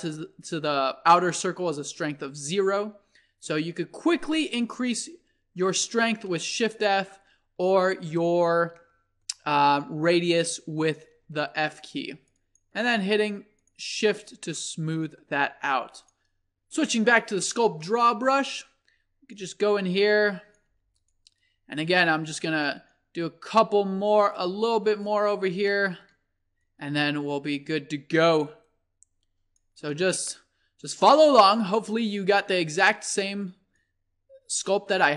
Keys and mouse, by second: 2.8-5.2 drag, 6.3-11.8 middle drag, 11.8-14.8 drag, 14.7 middle click, 15.2 click, 15.6-16.1 middle drag, 17.8-19.2 drag, 19.3 drag, 19.5 click, 20.7 f, 24.2-25.7 drag, 25.7-26.4 middle drag, 26.7-30.1 middle drag, 30.4-31.7 middle drag, 32.9 middle click, 33.8-35.1 middle drag.